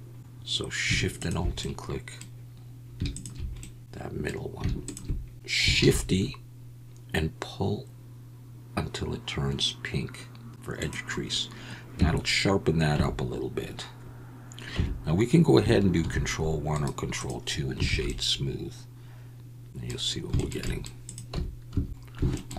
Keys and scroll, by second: 5.8 shift+e, 12.0 Tab, 12.9 Tab, 14.7 Tab, 16.0 ctrl+1, 17.9 alt+a, 21.3 Tab, 21.7 a.